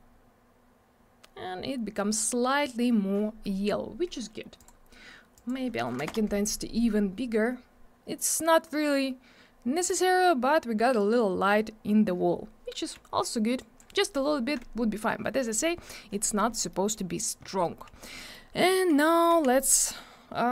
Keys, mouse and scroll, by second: 1.4 scroll up 1, 2.0 scroll down 1, 4.5 click, 5.3 click, 6.0 5, 6.0 Return, 8.6-9.2 scroll up 1, 11.3 scroll down 1, 13.5 click, 16.7 middle click, 17.6 middle click, 17.9 scroll down 1, 18.1 middle click, 18.7-19.0 scroll up 1, 19.0 middle click, 19.3 r.